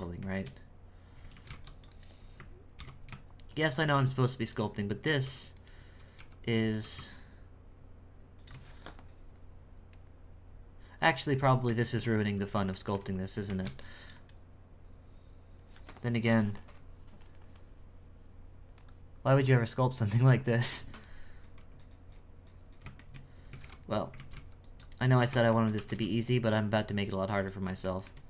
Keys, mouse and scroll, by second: 0.2-1.3 shift+middle drag, 4.4 right click, 8.7-11.3 scroll down 7, 11.3-11.8 scroll up 1, 11.8 shift+middle click, 12.1-12.7 scroll down 2, 12.7 shift+middle click, 13.5 alt+a, 13.6 c, 20.9-22.9 scroll up 3, 22.9 shift+scroll up 1, 23.0 shift+middle click, 23.5 x, 24.0-25.1 scroll up 2, 25.1-25.5 scroll down 3, 25.5 shift+middle click, 25.8 e, 27.8 shift+middle click.